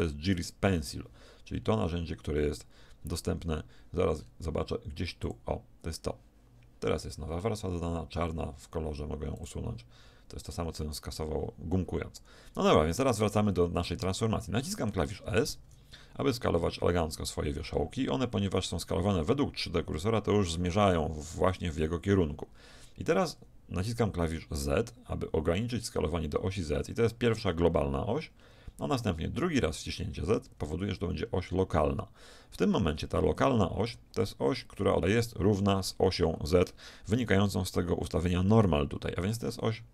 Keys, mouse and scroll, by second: 0.4 n, 1.6-2.6 middle drag, 1.6-2.6 scroll down 1, 3.6 middle click, 4.2-6.1 middle drag, 6.1-7.2 drag, 9.4-12.4 drag, 13.0-14.8 middle drag.